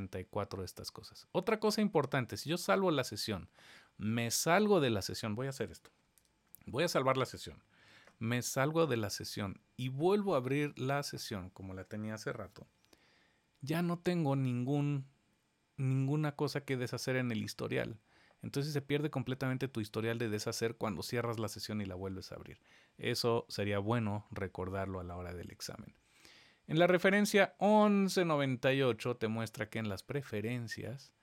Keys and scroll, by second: 2.5 super+a, 6.2 super+s, 7.8 shift+super+w.